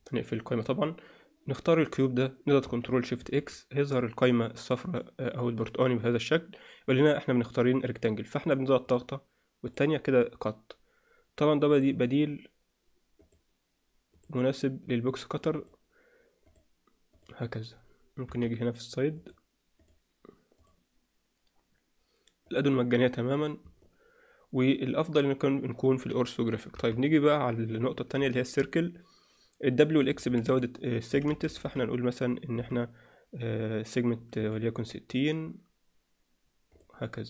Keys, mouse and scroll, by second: 0.7 click, 3.8 ctrl+shift+x, 18.2 KP_3, 23.8-37.2 alt+middle drag, 26.7 KP_3.